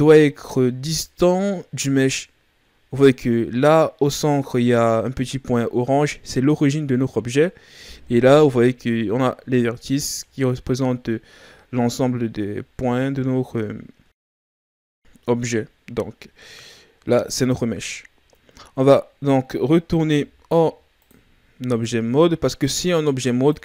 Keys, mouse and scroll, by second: 3.1-6.1 scroll up 2, 10.2-10.8 ctrl+scroll up 4, 10.8-11.9 scroll down 4, 20.0 s, 21.8 click.